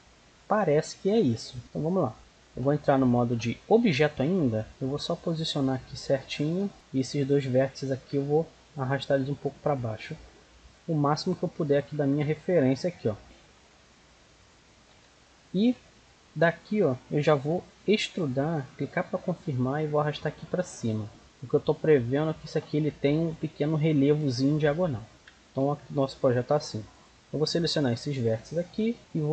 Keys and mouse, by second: 0.0-0.6 middle drag, 1.6 Tab, 2.2-3.8 right drag, 3.1 Tab, 4.1-5.9 drag, 6.2 Tab, 7.0-9.7 right drag, 8.6 click, 9.7 click, 10.7-13.2 right drag, 12.7 click, 13.3-17.9 middle drag, 17.9 e, 19.9-21.2 drag, 25.0 middle click, 25.6 z, 26.7 middle click, 27.0-29.0 right drag, 28.5 x, 29.0 z.